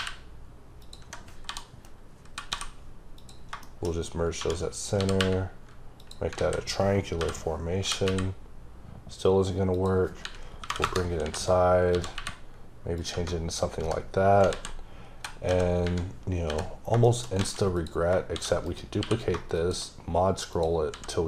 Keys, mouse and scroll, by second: 0.8 click, 1.5 m, 2.2 scroll up 2, 2.4 n, 3.2 click, 3.6 shift+middle click, 4.4 1, 4.7 click, 5.0 g, 6.0 click, 6.4 alt+a, 9.8 click, 10.2 r, 10.6 KP_9, 10.8 KP_Enter, 11.2 shift+r, 13.0 click, 13.1 —, 13.5-13.9 scroll down 3, 13.9 h, 15.2-15.8 typing, 17.1 shift+middle click, 17.4 a, 17.8 click, 18.4 shift+d, 18.7 right click, 19.0 q, 19.6 shift+click, 20.9 s.